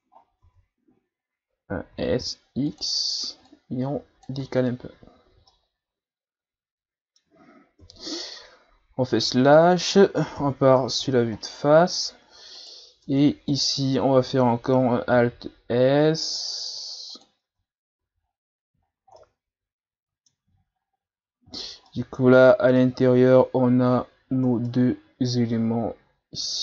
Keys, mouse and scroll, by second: 0.5 Tab, 1.9 s, 3.5 click, 4.4 Tab, 4.6 scroll down 1, 4.9 a, 5.3 a, 5.5-7.8 middle drag, 7.8 KP_Divide, 9.4-10.0 shift+scroll up 4, 10.3 scroll up 1, 10.4 KP_1, 11.3-12.1 shift+scroll up 8, 12.6 right click, 13.0 Tab, 13.5 right click, 15.1 alt+s, 17.5 Tab, 18.0 a, 18.3-18.9 scroll down 6, 19.0 shift+scroll down 1, 19.2-20.6 middle drag, 20.6 shift+scroll down 2, 20.9-21.6 scroll up 5, 21.6 shift+scroll down 1, 21.9-26.6 middle drag.